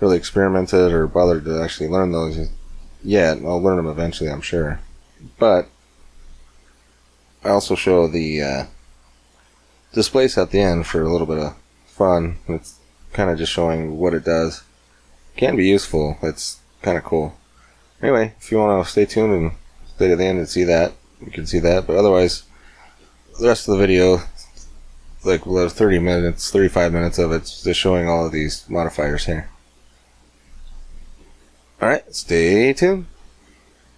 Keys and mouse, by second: 5.6-7.9 drag, 12.2 middle click, 15.3-28.0 middle drag, 28.0-31.4 drag.